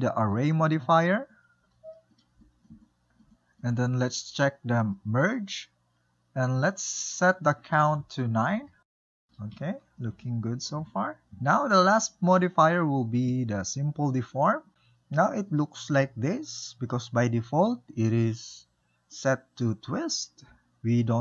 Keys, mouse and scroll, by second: 1.9-5.8 middle drag, 5.8 click, 7.8-9.4 drag, 9.4-11.3 shift+middle drag, 11.8-14.7 drag, 15.0-17.8 middle drag.